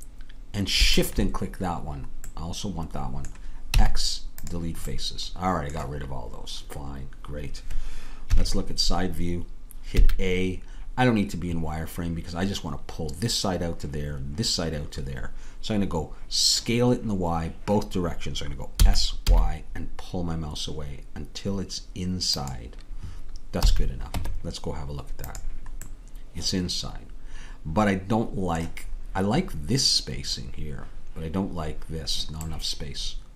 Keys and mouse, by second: 3.7 x, 8.3 KP_3, 10.0 a, 18.8 s, 23.7 a, 24.2 Tab, 32.5-33.3 middle drag.